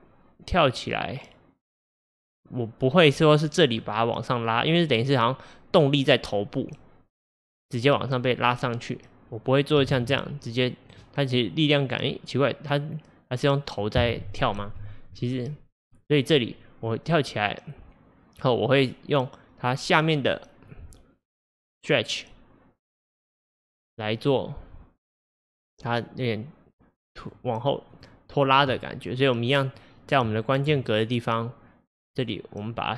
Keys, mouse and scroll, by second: 10.0 g, 11.6-14.6 drag, 14.6 ctrl+z, 16.0-27.4 drag, 27.9 click, 29.2-30.6 drag, 32.1 shift+click, 32.6 click.